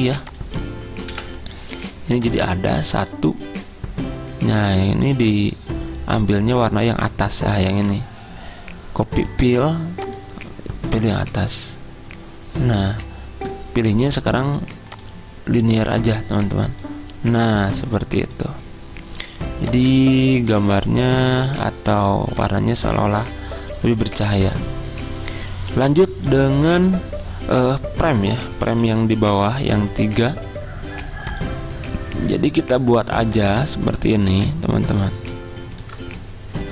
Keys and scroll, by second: 1.3 Delete, 28.9 z.